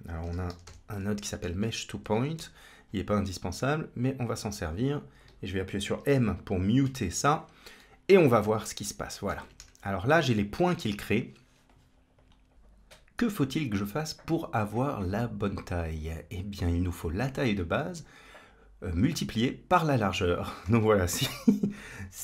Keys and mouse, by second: 1.3 Down, 5.0 click, 6.7 m, 7.7-9.2 middle drag, 9.5 KP_1, 12.0 click, 20.5 shift+a.